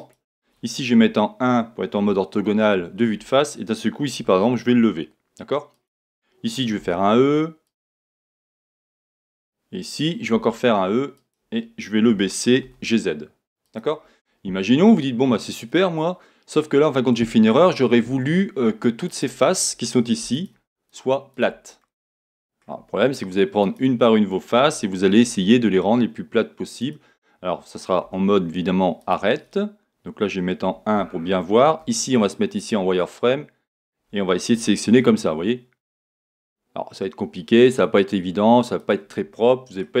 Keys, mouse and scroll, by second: 0.1 click, 2.4-5.8 shift+middle drag, 4.3 g, 5.8 click, 6.8 e, 7.8 click, 8.6-11.3 middle drag, 10.3 e, 11.3 click, 12.1 g, 13.7 click, 14.1-14.8 scroll down 2, 14.8-16.0 middle drag, 16.2-19.0 middle drag, 19.0 click, 20.3 shift+click, 20.9 shift+click, 21.3 shift+click, 21.8-23.6 middle drag, 23.0-23.6 scroll up 2, 23.6 click, 26.6 g, 26.9 click, 26.9 click, 28.0 2, 29.0 click, 30.6 KP_1, 31.8 z, 34.6 g, 38.9 click, 39.3-40.0 middle drag.